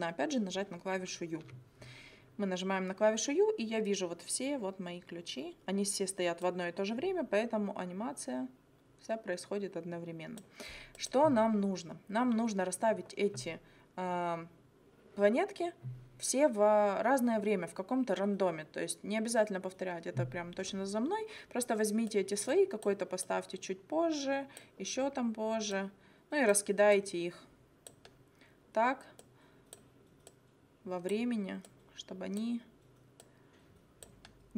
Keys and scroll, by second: 1.4 u.